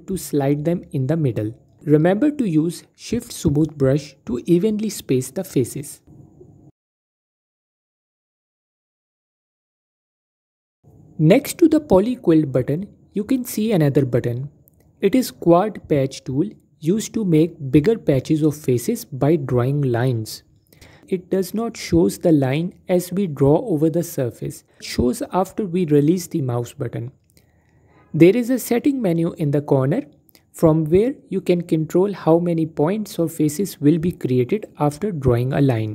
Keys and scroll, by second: 0.0 a, 29.5 a, 29.7 a, 30.5 a, 30.9 a.